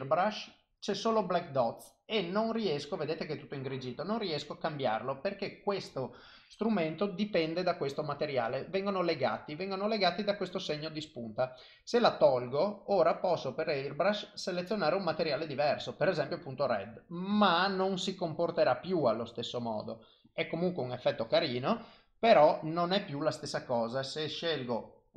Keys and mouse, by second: 1.7 click, 3.9 click, 12.3 click, 16.4 click, 17.3 click, 18.7 click, 19.4 click, 20.3 click, 20.7 click, 21.2 click, 22.4 click, 23.7 click.